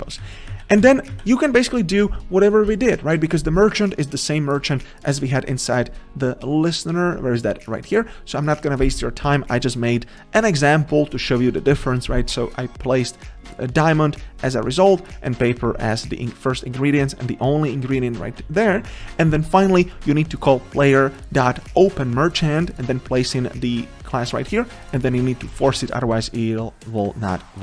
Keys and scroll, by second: 0.8 ctrl+z, 18.3 ctrl+z, 25.8 ctrl+s.